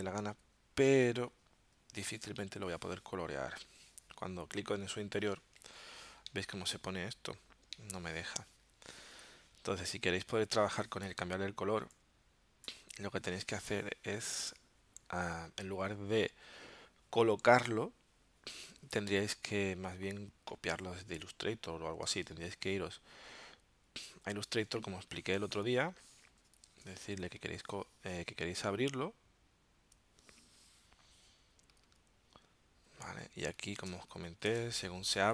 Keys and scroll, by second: 6.3 alt+super+0, 7.8 alt+super+-, 12.7 BackSpace, 24.7 space, 33.2 z, 33.9 space, 34.8 super+y.